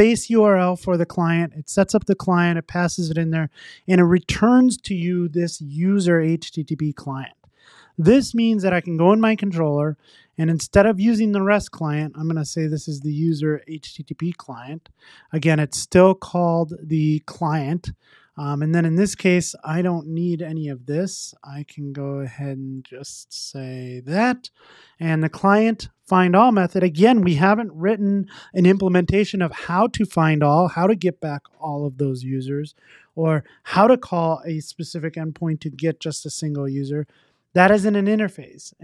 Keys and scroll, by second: 6.8 super+s, 13.9 Return, 14.3 super+s, 22.8 alt+Return, 24.1 super+s, 37.5 super+s.